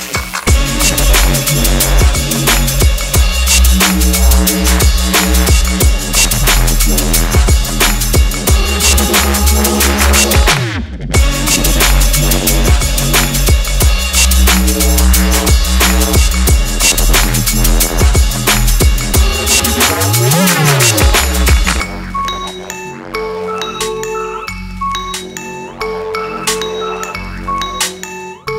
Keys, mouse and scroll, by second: 0.9 click, 2.6 ctrl+j, 3.5 right click, 4.9 click, 6.9-7.3 drag, 11.2 click, 11.2 click, 21.0 click, 21.4 right click, 22.3 click, 26.3 click, 28.3-28.5 drag.